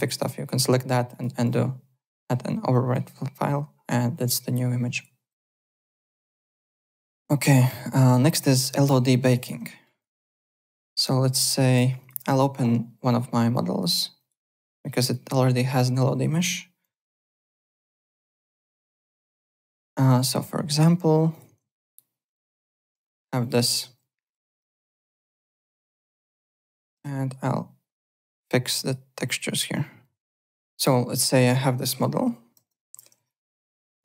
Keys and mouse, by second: 1.1 click, 2.7 click, 5.5 click, 6.1 alt+Tab, 6.6 alt+click, 8.7 click, 9.1 `, 9.8 alt+right click, 10.1 alt+middle click, 10.3 alt+click, 10.7 alt+middle click, 10.8-12.0 typing, 12.0 click, 14.2 click, 14.8 click, 16.9 p, 17.3 alt+middle click, 17.6 alt+right click, 18.1 o, 19.2 click, 21.3 click, 22.2 ctrl+click, 22.9 /, 23.4 click, 23.6 z, 24.2 click, 24.6 w, 25.5 click, 26.5 click, 26.5 `, 26.9 m, 28.8 click, 31.3 click, 32.2 KP_1, 32.5 Return, 33.2 alt+click.